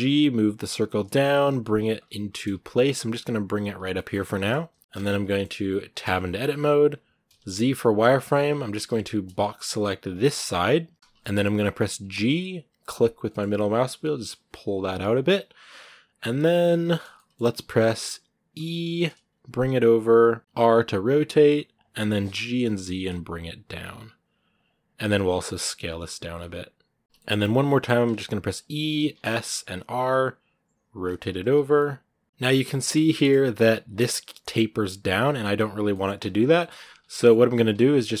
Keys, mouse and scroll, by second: 1.8 scroll up 1, 2.1 s, 3.7 shift+middle click, 3.9 shift+scroll up 3, 4.5 s, 5.0 shift+middle click, 5.8 Tab, 10.9 shift+middle click, 10.9 KP_3, 11.0 shift+middle click, 11.8 g, 16.5-18.3 shift+middle drag, 18.3 e, 27.0 shift+middle click, 27.1 shift+scroll up 1, 27.5 e, 31.3 scroll down 2, 31.3 Tab, 31.6 middle click, 32.5 Tab, 32.9 shift+middle click, 33.2 scroll up 1, 33.7 scroll down 1, 35.7-38.2 shift+middle drag.